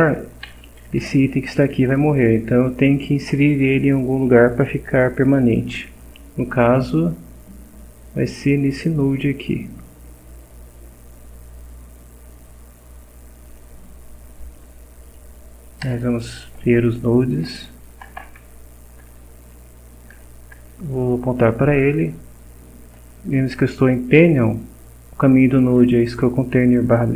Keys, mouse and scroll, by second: 0.5 Up, 1.0 Right, 1.9 Down, 9.0 click, 13.5 click, 15.9 Return, 17.9 Return, 18.4 shift+4, 20.1 Down.